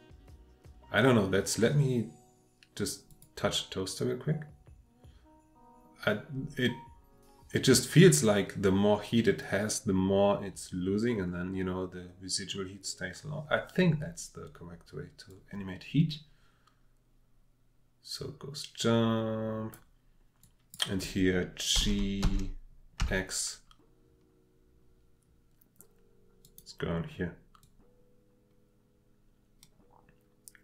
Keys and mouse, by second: 3.1 click, 15.3-19.7 drag, 20.4-20.9 drag, 22.2 g, 23.0 x, 26.4 click, 27.6-30.6 drag.